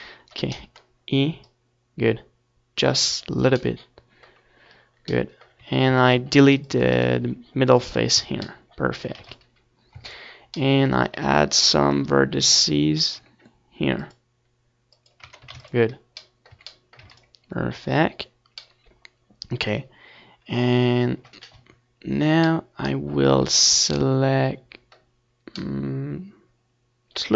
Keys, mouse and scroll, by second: 0.2 ctrl+s, 1.0 Tab, 3.8 ctrl+r, 6.1-7.8 drag, 6.3 Tab, 6.5 ctrl+s, 7.6 a, 8.1 ctrl+s, 13.8-15.0 middle drag, 15.0-16.7 drag, 15.0-16.7 right drag, 16.7-18.3 middle drag, 19.1 KP_3, 25.3-27.3 middle drag, 25.8 Tab, 26.4 z, 26.7 a, 27.0 a.